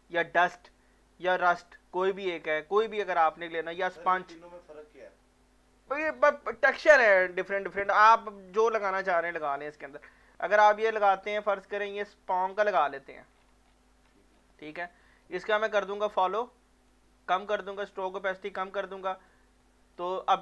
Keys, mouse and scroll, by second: 1.2 click, 12.5 click, 13.3 scroll down 2, 14.3 scroll down 1, 15.0 scroll down 1, 16.2 click, 16.4-17.8 drag, 17.8-19.3 drag, 19.3-20.4 drag.